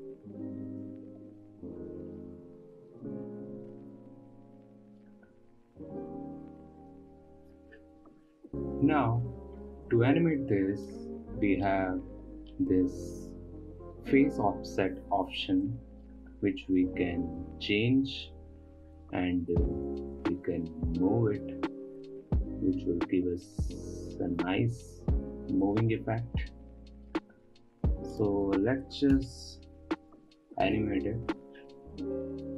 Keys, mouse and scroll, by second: 0.8-2.0 drag, 3.3-5.1 drag, 5.1 middle click, 5.3 scroll down 5, 5.5 middle click, 5.7-6.3 scroll up 3, 6.3-8.0 shift+drag, 10.6-12.2 drag, 12.2-13.1 middle drag, 13.1-14.5 scroll up 2, 14.5-16.0 scroll up 1, 16.3-20.9 drag, 25.4-28.7 middle drag, 28.7-31.3 drag.